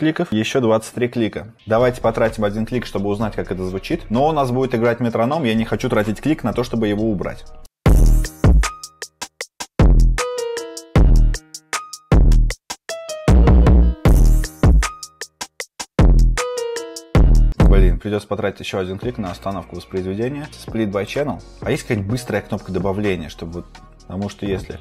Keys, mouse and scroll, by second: 19.4-24.8 click, 19.4 scroll.